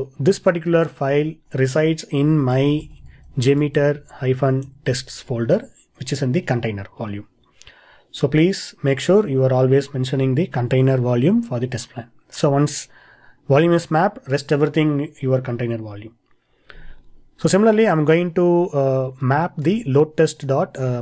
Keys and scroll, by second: 19.8 super+c, 20.8 super+v.